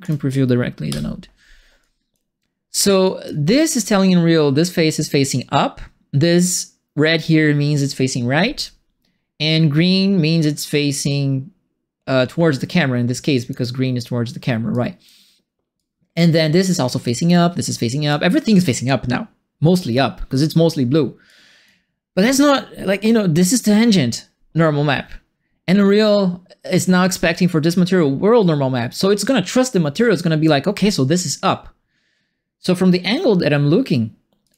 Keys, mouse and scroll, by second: 0.0 click, 0.8 p, 1.8 click, 3.0 click, 13.1 click, 14.7 click, 15.7 click, 17.0 click, 17.7 click, 20.3 click, 21.2 click, 27.0 click, 28.8 click, 30.1 click, 34.4 click.